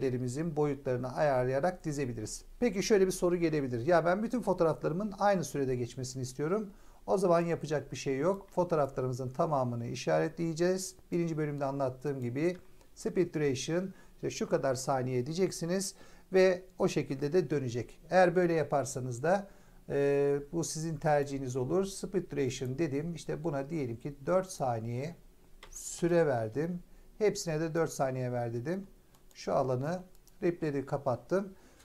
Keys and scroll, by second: 25.5 BackSpace, 25.9 4.